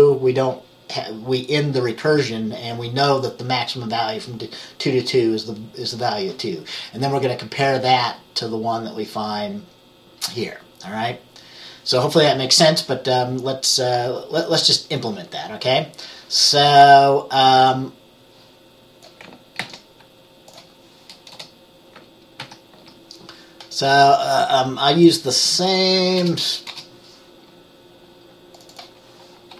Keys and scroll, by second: 19.7 ctrl+c, 21.4 Return, 22.5 ctrl+v, 26.3 BackSpace, 26.8 BackSpace.